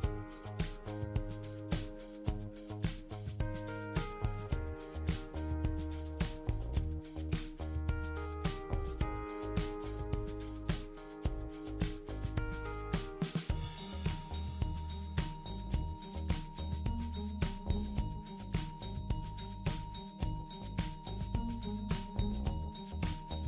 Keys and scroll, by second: 4.5 super+c, 4.7 super+v, 5.4 ctrl+d, 6.0 super+d, 10.3 BackSpace, 11.2 super+d, 14.4 ctrl+d, 15.0 super+d, 15.7 super+d, 16.1 super+d, 17.5 super+d, 18.0 super+d, 18.5 super+d.